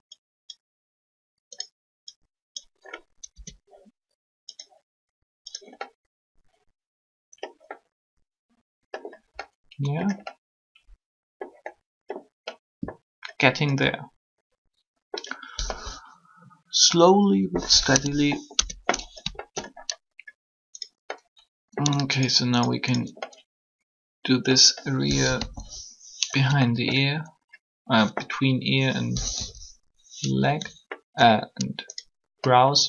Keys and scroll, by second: 3.3 Tab, 17.7 3, 18.5 Tab, 25.2 1, 29.0 3.